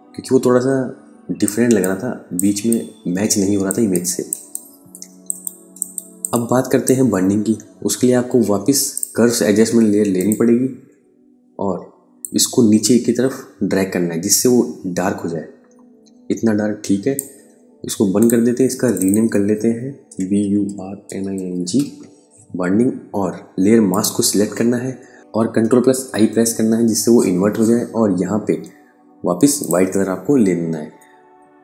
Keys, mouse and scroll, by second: 1.0 space, 1.2 click, 1.7 space, 2.2 ctrl+alt+click, 4.0 ctrl+alt+click, 5.4 ctrl+alt+click, 19.3-21.5 typing, 23.3 click, 25.0 b, 25.5 ctrl+i, 29.0 click.